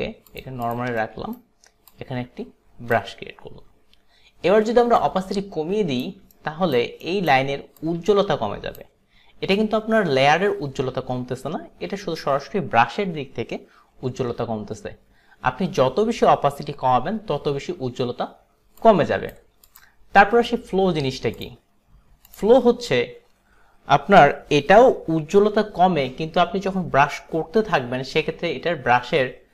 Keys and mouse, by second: 0.4 click, 0.7 click, 1.1 alt+right click, 1.9 click, 5.1 click, 6.5 alt+right click, 7.1 alt+right click, 7.9 click, 7.9 alt+right click, 18.8 click, 19.7 ^, 19.7 click, 22.3 click.